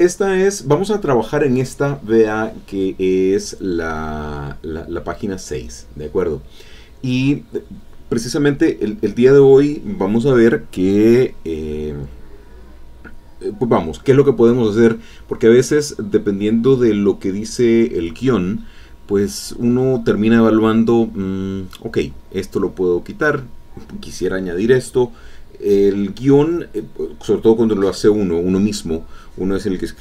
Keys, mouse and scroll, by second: 2.4-3.7 drag, 7.9-9.7 drag, 15.9 click, 19.2-20.2 drag, 20.2 alt+Tab, 21.4 alt+Tab, 27.1 click, 27.8 click, 28.2 alt+Tab.